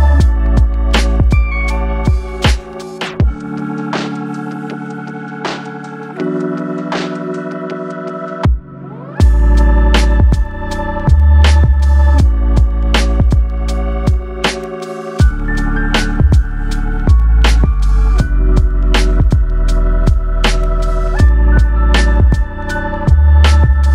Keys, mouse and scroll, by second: 0.6 click, 2.9 middle click, 4.6 click, 9.4 click, 11.9 click, 14.3-14.6 scroll down 2, 14.6 middle click, 16.0-17.2 scroll up 4, 17.2 click, 19.0 click, 20.8 click.